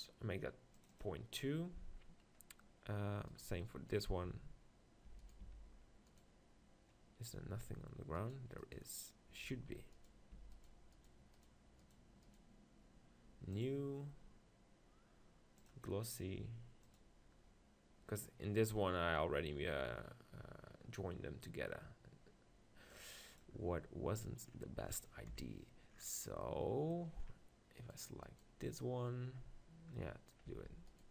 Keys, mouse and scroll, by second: 3.3 right click, 4.2 Tab, 5.1 Tab, 5.6 Tab, 9.4 z, 10.4 Tab, 11.4-12.6 right drag, 12.6 click, 13.0-16.9 right drag, 13.7-18.0 drag, 23.0-25.1 drag, 25.1-27.8 middle drag, 25.4 KP_7, 27.8 click, 30.5 Tab.